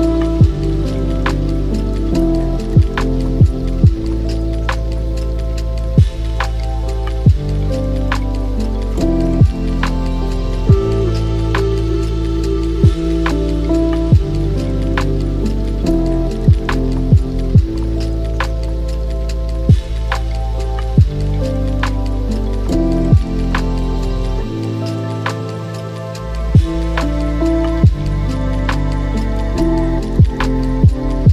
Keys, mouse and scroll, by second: 1.2 r, 3.4-10.7 middle drag, 4.6 g, 7.6 s, 11.1-12.2 middle drag, 12.2 s, 14.8-15.9 drag, 15.9 KP_0, 17.5-21.5 middle drag, 18.5 g, 27.7 click, 28.7 h, 31.2 click.